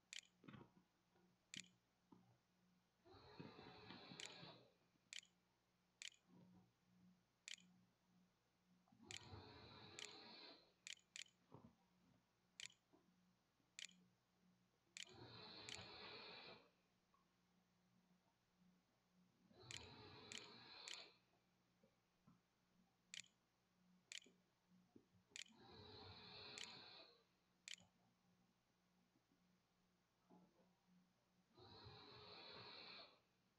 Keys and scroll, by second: 0.0-3.4 typing, 3.7 Tab, 5.1-12.4 typing, 14.0 shift+Return, 14.3-17.8 typing, 15.5 Return, 19.5-25.3 typing, 26.5-28.5 typing.